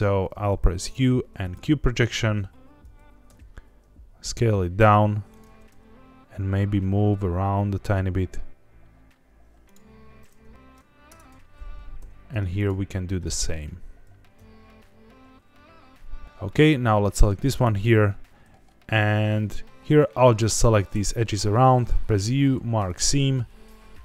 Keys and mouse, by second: 0.8 u, 2.8 a, 3.2 s, 5.3 click, 5.4 g, 5.7 y, 9.6 click, 10.4 g, 10.5 Tab, 11.1 Tab, 11.3 a, 11.9 u, 14.0 a, 14.3 s, 16.2 Tab, 17.0 middle click, 17.5 Tab, 18.9 2, 22.0 u, 23.3 a.